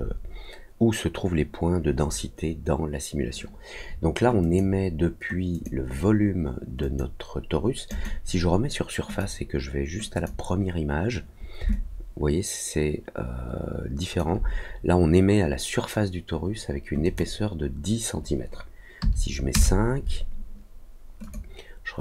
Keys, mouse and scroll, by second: 4.4 click, 5.5 click, 6.8 click, 7.8 click, 9.0 click, 10.1 click, 11.6-14.1 alt+drag, 17.0 click, 21.2 click.